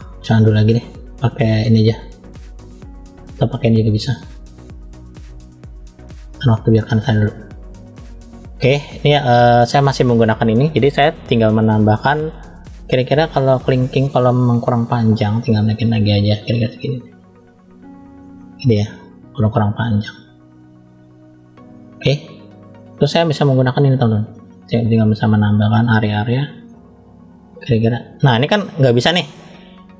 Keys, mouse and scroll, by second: 1.6 click, 2.2 click, 3.6 click, 4.3-6.7 drag, 7.4 shift+middle click, 9.4 click, 11.4 scroll up 1, 14.5-16.1 drag, 18.0 scroll up 1, 18.2 middle click, 18.3 scroll down 1, 20.1 click, 20.1 scroll down 2, 21.7-22.3 scroll up 2, 23.5 click, 24.5 click, 26.0 middle click, 26.8 click, 28.5 middle click, 29.5 click.